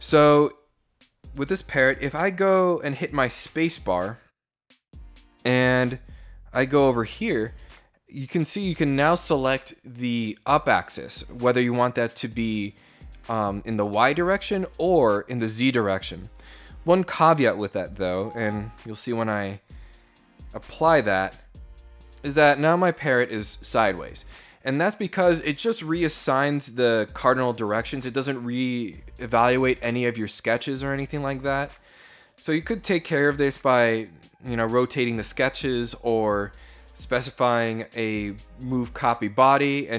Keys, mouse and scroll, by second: 0.9 click, 8.0 click, 17.5 click, 19.7 click.